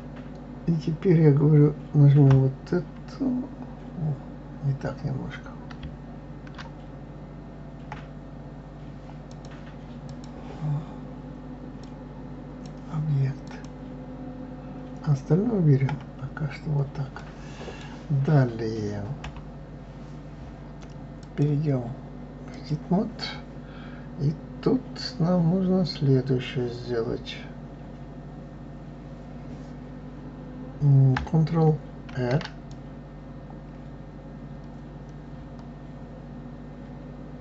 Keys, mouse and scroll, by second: 2.2 KP_Divide, 7.9 KP_Divide, 9.3 click, 10.0 click, 11.8-13.6 drag, 15.9 KP_Divide, 17.2-19.2 middle drag, 19.2 KP_3, 21.2-24.1 drag, 32.1 ctrl+r.